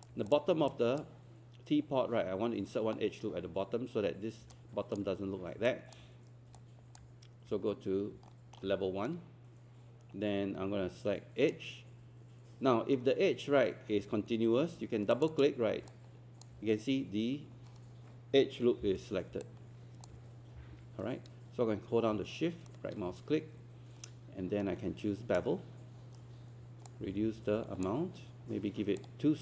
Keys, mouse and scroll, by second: 1.9-4.4 scroll up 1, 4.5 alt+click, 5.7 alt+click, 6.6 alt+click, 8.3 alt+middle click, 9.1-12.3 right drag, 15.1 click, 15.9 alt+click, 18.8 4, 19.4 alt+click, 20.6 alt+5, 22.7-26.3 shift+right drag, 26.9-29.4 drag.